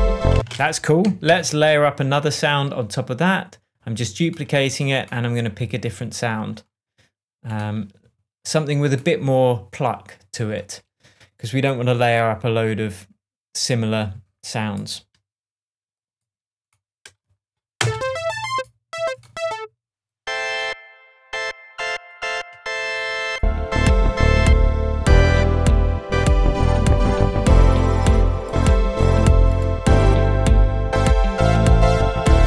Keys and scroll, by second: 0.3 space, 1.0 super+space, 1.2 super+d, 17.8 space.